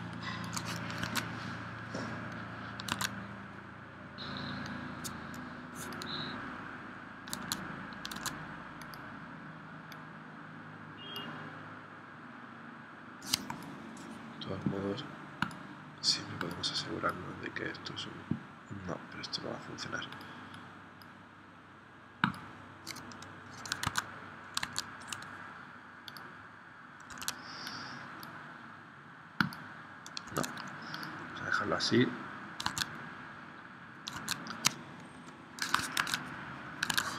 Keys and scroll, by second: 1.0 super+Tab, 2.9 super+Tab, 7.4 super+Tab, 23.9 super+Tab, 24.7 super+Tab, 27.1 super+z, 30.3 super+z, 32.8 super+Tab, 34.3 super+Tab, 35.1 p, 36.0 super+Tab, 37.0 super+Tab.